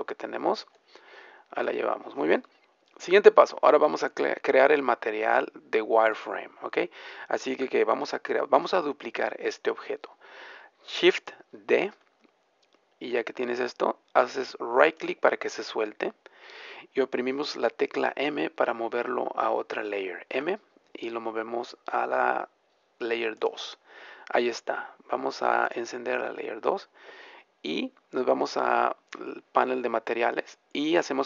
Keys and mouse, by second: 3.4-6.1 middle drag, 6.3-8.4 drag, 8.4 middle click, 11.9 shift+d, 20.3 m.